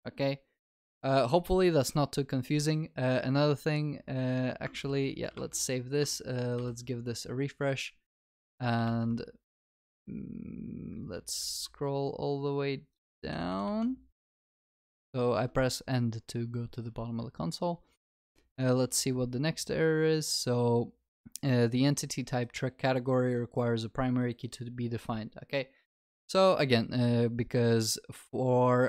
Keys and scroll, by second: 4.8 ctrl+s, 9.6 alt+F12.